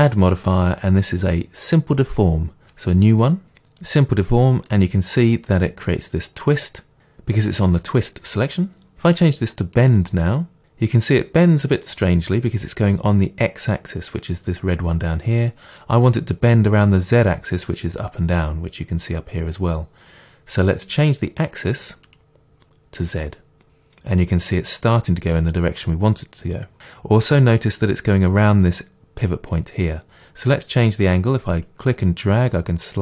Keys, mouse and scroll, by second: 4.7-9.8 middle drag, 9.8 click, 10.6-22.1 middle drag, 22.1-26.8 drag, 26.8-31.2 middle drag, 31.2-33.0 drag.